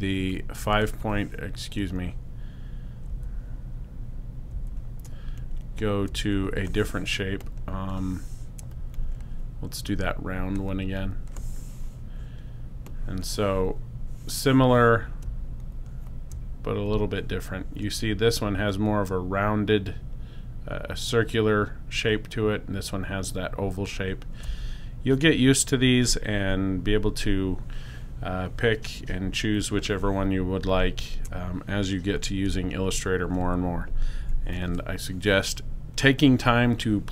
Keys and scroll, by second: 32.1 BackSpace, 34.1 super+0.